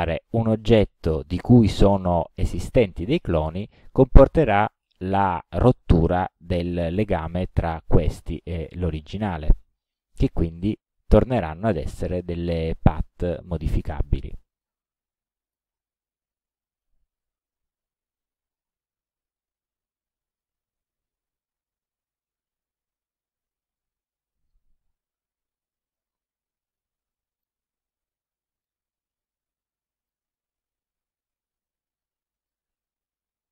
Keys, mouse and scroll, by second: 7.7-9.5 drag, 10.7 click, 11.9-13.3 drag, 14.2 click, 15.5 click, 16.4 click, 20.5-24.8 drag, 25.5 Delete, 26.0-27.7 drag, 27.9 Delete, 28.4 middle click, 29.4-30.4 drag, 30.6 Delete, 31.4-32.7 drag.